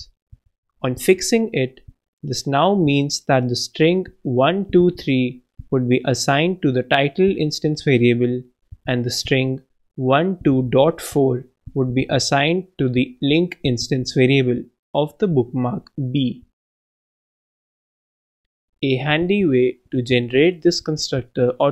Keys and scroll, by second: 1.2 shift+Right, 1.3 shift+', 1.7 shift+super+Right, 2.0 super+Left, 2.4 shift+', 18.1 super+Up, 18.4 super+BackSpace, 19.1 super+Up, 19.5 super+BackSpace.